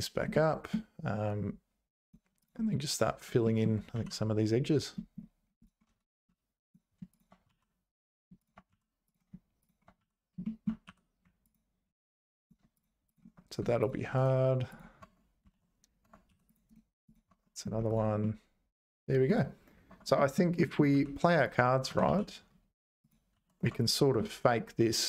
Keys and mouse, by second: 0.3 middle click, 2.1 click, 3.4 middle click, 3.9 ctrl+r, 6.2 2, 7.5 f, 8.0 click, 8.4 shift+click, 8.7 f, 10.0 f, 10.4 click, 10.9 2, 11.5 alt+click, 12.4 click, 12.7 shift+click, 13.1 click, 14.2 right click, 15.0 Tab, 15.5 ctrl+s, 16.0 Tab, 16.3 2, 16.5 click, 16.7 right click, 17.3 Tab, 18.2-19.2 middle drag, 19.9 Tab, 20.1 middle click, 20.6 middle click, 20.9 2, 21.8 g, 23.3 ctrl+s, 23.6 Tab, 23.8 click, 24.1 middle click.